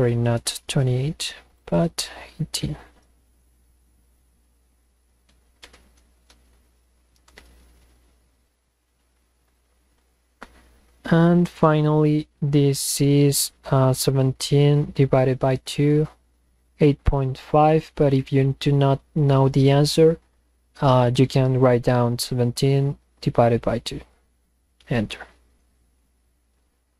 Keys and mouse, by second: 1.5 click, 6.4 Return, 9.5 click, 11.4 click, 24.2 Return.